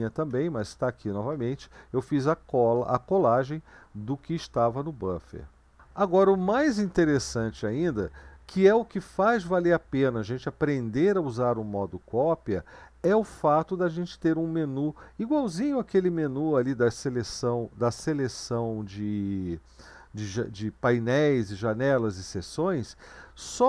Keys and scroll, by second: 0.7 Up, 6.9 Down.